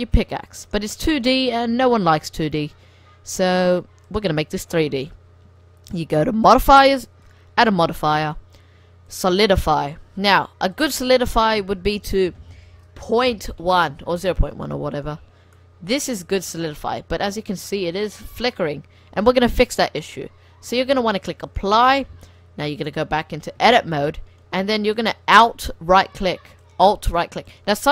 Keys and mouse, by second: 0.5-3.4 drag, 1.4 r, 5.9-9.0 drag, 9.7-11.7 middle drag, 10.7-12.5 drag, 15.6-16.1 middle drag, 17.9-18.2 middle drag, 21.4-22.6 drag, 22.6 middle click, 22.7 click, 23.2-23.7 middle drag, 23.7 Tab, 25.0 click, 25.9 click, 26.7 click, 26.8 click.